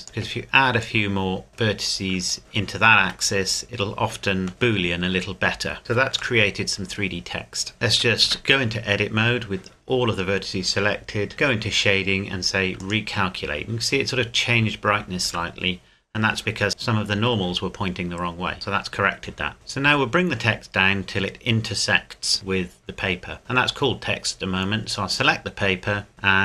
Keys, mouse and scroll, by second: 3.0 Tab, 3.6-4.5 scroll up 1, 4.5 middle click, 7.9 a, 8.2 a, 9.9 a, 11.3 click, 15.3 Tab, 15.8-16.7 scroll up 1, 16.7 middle click, 17.8 scroll down 1, 18.5 click, 24.9 right click.